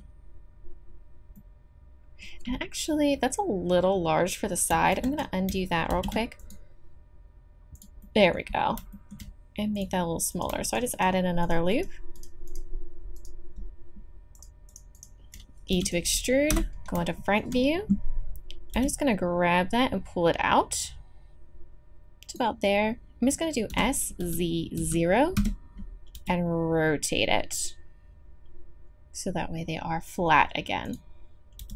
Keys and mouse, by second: 4.9 ctrl+z, 5.9 ctrl+r, 9.7-12.2 middle drag, 15.7 e, 16.5 KP_1, 17.2-19.2 drag, 18.7 g, 23.7 s, 26.1 r, 31.6 g.